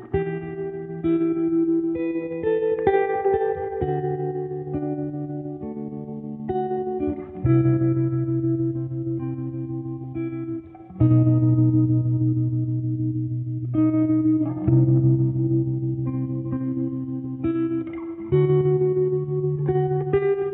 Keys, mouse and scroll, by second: 0.0-1.5 typing, 3.2 typing, 4.9-6.8 typing, 7.4 Return, 7.9-10.0 typing, 12.1 shift+-, 13.6 Left, 14.1 Right, 15.3 space, 16.7 4, 17.8 7, 19.7-20.5 typing.